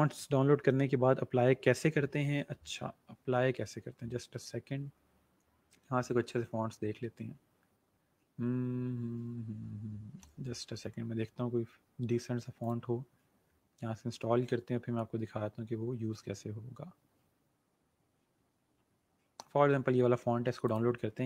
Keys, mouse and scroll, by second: 3.3 scroll down 1, 5.0 scroll up 1, 5.8 scroll down 1, 9.4 scroll up 1, 12.5 click, 14.1 scroll down 1, 18.7 scroll up 1, 19.6 scroll down 1.